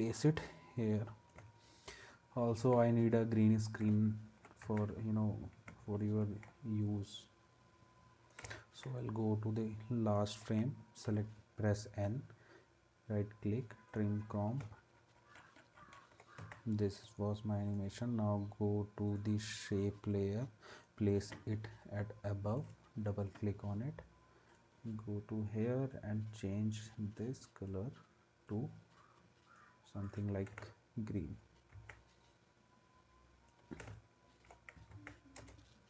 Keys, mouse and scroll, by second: 4.6 ctrl+s, 11.0 n, 16.4 ctrl+s, 22.9-30.5 drag, 31.7 ctrl+s, 34.9 ctrl+s, 35.4 space.